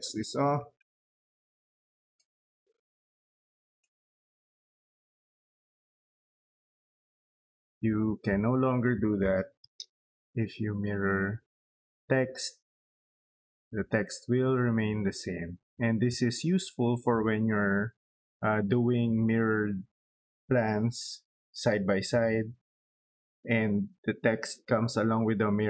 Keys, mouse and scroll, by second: 0.0-1.8 typing, 3.0 0, 3.3 space, 5.6 middle click, 6.6 click, 7.2 click, 7.5 scroll down 2, 7.7 middle click, 8.2 scroll up 2, 8.6 middle click, 9.4 i, 9.4 space, 9.8 click, 15.3 middle click.